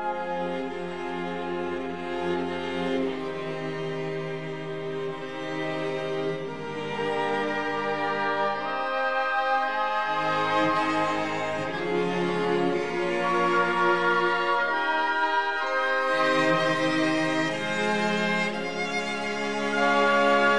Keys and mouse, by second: 1.8 click, 2.6 click, 3.3 KP_3, 3.7 g, 3.8 z, 6.0 click, 8.1 3, 8.5 click, 9.3 shift+click, 10.1 shift+click, 10.8 e, 11.2 click, 12.1 s, 13.0 click, 13.9-16.4 drag, 17.0 e, 17.5 click, 18.4-20.4 drag.